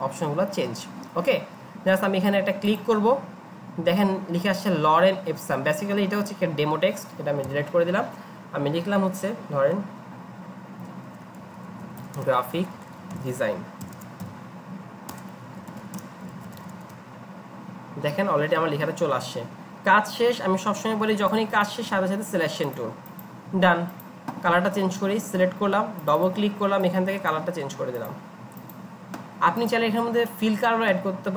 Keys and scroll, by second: 7.5 BackSpace, 10.8-17.3 typing, 15.2 Return, 18.5-19.2 typing.